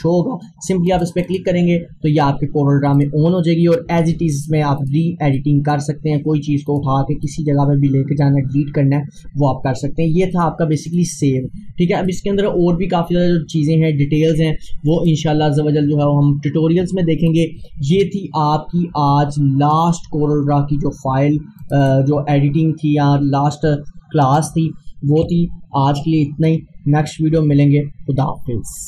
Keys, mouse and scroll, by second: 3.4 scroll down 1, 4.4-6.7 drag, 8.8 scroll down 1, 10.4 click, 14.9 click, 17.3 click, 19.8 click.